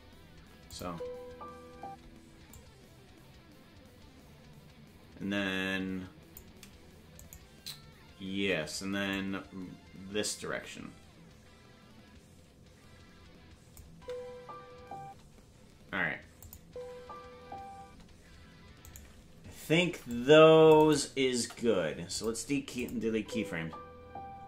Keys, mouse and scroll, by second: 0.7-2.2 drag, 0.8 space, 1.8 space, 2.5-6.4 drag, 7.2-9.1 right drag, 9.1-13.7 drag, 13.9 space, 16.4 click, 16.6 space, 18.8-19.8 right drag, 18.8 space, 19.8 c, 21.3 Delete, 22.7 click, 23.1 space.